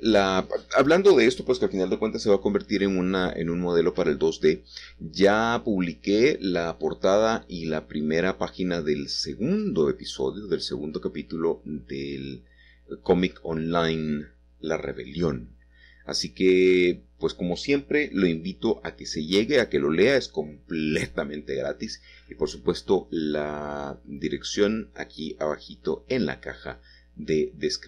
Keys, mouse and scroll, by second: 2.0 Escape, 3.3 shift+click, 3.7 click, 4.2 click, 5.1 e, 5.3 s, 7.7-11.1 middle drag, 12.0 c, 12.4-13.9 drag, 15.2 click, 16.7 c, 17.2-18.3 drag, 20.3 click, 22.8-23.9 drag, 23.9-24.6 scroll down 1, 24.6 middle click, 26.8 click.